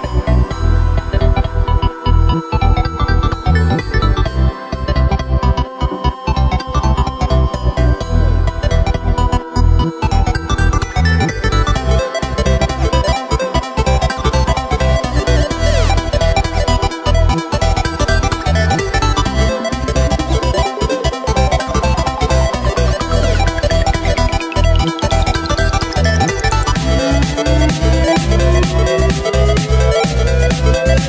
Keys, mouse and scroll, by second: 0.1 scroll up 2, 0.3 middle click, 0.9-1.7 scroll down 4, 1.7-3.2 middle drag, 3.2 alt+shift+right click, 4.2 ctrl+b, 7.0 Tab, 7.2-7.6 scroll down 2, 7.6-9.2 middle drag, 9.2 KP_1, 11.8 ctrl+KP_3, 12.2-12.6 scroll up 1, 12.6 right click, 13.0 scroll up 2, 13.2 Tab, 13.7 right click, 14.8 3, 15.5 alt+shift+right click, 16.5 s, 18.6 Tab, 19.0-20.2 scroll down 1, 20.2 alt+d, 21.5 g, 22.8 x, 23.6 Tab, 23.9 right click, 24.1 Tab, 25.1 2, 25.5 right click, 26.1 alt+shift+right click, 26.3 alt+shift+right click, 27.5 ctrl+b, 28.7 Tab, 29.4 Tab, 30.2 g.